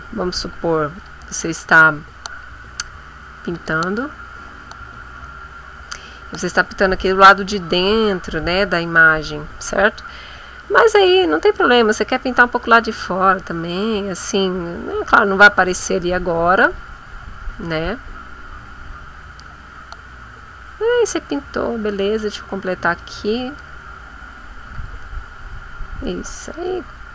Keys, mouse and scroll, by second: 0.1 shift+click, 1.7 click, 3.5 click, 4.1 shift+click, 5.3-10.3 drag, 10.6-22.1 drag, 22.8 click, 23.5 click, 24.7 click, 26.5 click.